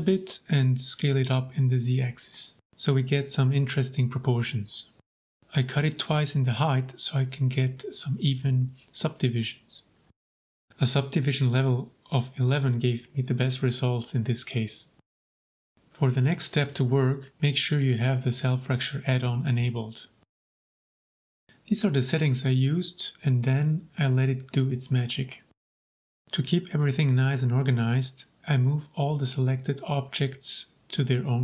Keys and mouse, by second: 0.2 z, 0.6 KP_3, 0.8 KP_Enter, 1.5 shift+middle click, 1.8-2.5 middle drag, 2.5 ctrl+a, 2.7-3.1 shift+middle drag, 3.4 Tab, 4.1 click, 5.1 ctrl+r, 6.4 Return, 7.0 click, 8.6 a, 8.9 w, 10.9 click, 11.5-12.8 drag, 12.2 KP_1, 13.6 Tab, 14.1 shift+click, 14.4 middle click, 16.0 space, 17.2 l, 26.7 m.